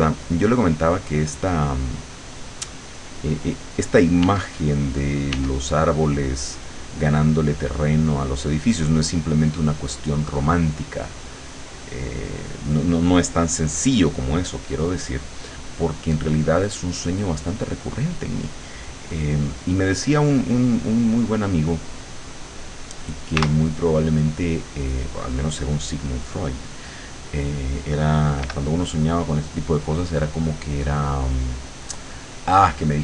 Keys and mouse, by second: 1.1-2.3 drag, 2.9-4.1 drag, 4.3 w, 5.4 w, 5.9-9.5 drag, 9.9 click, 23.5 w, 28.5 l.